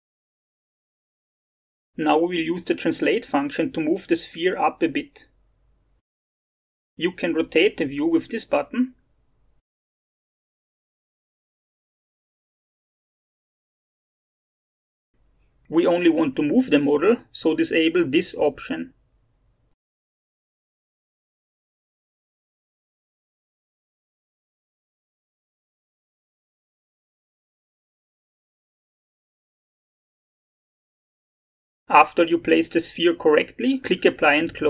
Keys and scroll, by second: 17.3 alt+Tab, 20.5-22.4 typing, 24.6 2, 25.3 5, 25.8 BackSpace, 26.7 5.